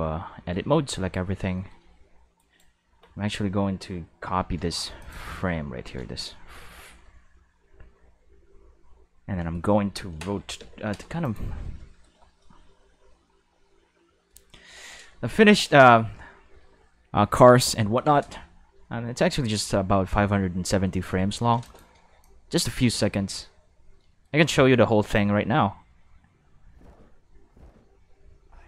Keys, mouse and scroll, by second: 0.5 a, 1.7-2.3 middle drag, 2.3 right click, 4.3 shift+d, 4.9 click, 5.2 shift+s, 10.5 ., 11.2 click, 15.7 shift+middle click, 17.7 ctrl+middle click, 21.0 middle click, 21.6 click, 22.2-22.5 drag, 22.9 space.